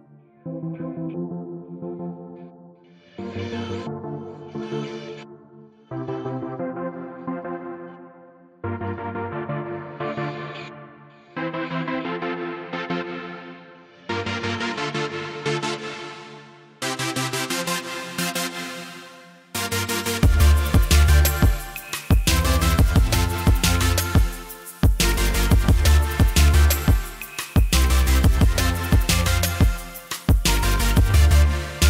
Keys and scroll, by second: 17.0-20.3 typing, 18.9 Caps_Lock.